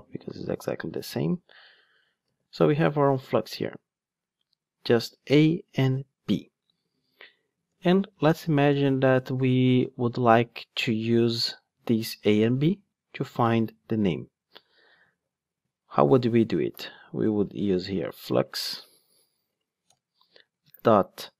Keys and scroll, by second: 0.1 super+c, 2.3 super+v, 17.3 Return.